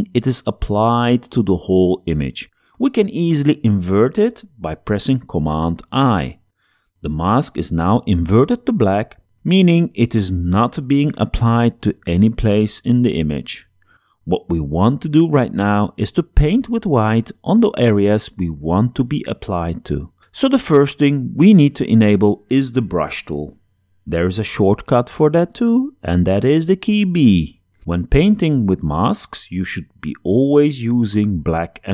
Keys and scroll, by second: 5.0 super+i, 26.4 b.